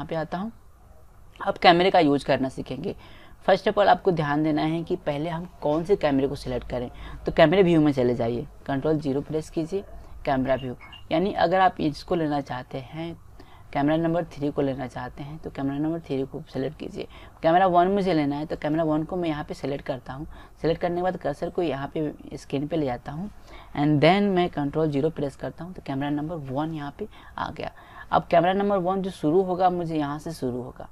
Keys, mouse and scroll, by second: 2.2 middle click, 9.0 ctrl+KP_0, 18.6-20.3 drag, 25.1 ctrl+KP_0, 30.5 click.